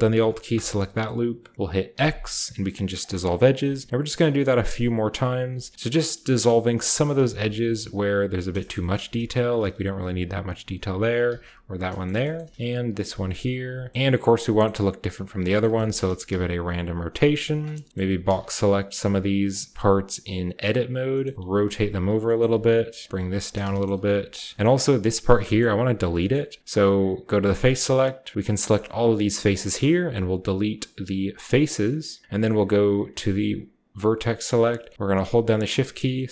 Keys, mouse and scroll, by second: 0.5 alt+click, 1.0 middle click, 1.9 x, 2.9 middle click, 3.0-5.7 drag, 4.5 alt+middle click, 5.4 x, 5.9 middle click, 6.0 click, 6.9-8.3 alt+middle drag, 7.5 x, 8.2 Tab, 8.3-9.1 scroll down 1, 8.9 click, 8.9 Tab, 9.1-9.7 scroll up 1, 9.5 alt+middle click, 10.2 x, 10.4-13.0 middle drag, 10.4-10.8 scroll up 1, 11.2 x, 11.9-13.0 scroll down 1, 13.0 x, 13.3 click, 13.9 Tab, 13.9-15.1 scroll down 1, 13.9 s, 13.9 g, 15.1-17.0 scroll up 1, 15.6 a, 15.7 a, 16.0 r, 16.2 z, 17.0 click, 17.3 g, 17.9-19.4 shift+scroll up 1, 17.9 z, 18.2 a, 18.9 b, 19.7-21.3 drag, 21.3-24.5 typing, 21.6 middle click, 21.9 middle click, 22.6 middle click, 23.4 middle click, 24.0 middle click, 24.5 shift+scroll down 1, 24.7-25.3 shift+scroll up 1, 25.3-26.6 shift+scroll up 1, 26.3 shift+middle click, 27.2-28.3 drag, 28.3 shift+right click, 28.6-31.1 shift+middle drag, 28.8 shift+right click, 29.4 shift+right click, 29.9 x, 31.5 click, 33.9 click, 34.7-35.7 shift+middle drag, 35.7 shift+right click.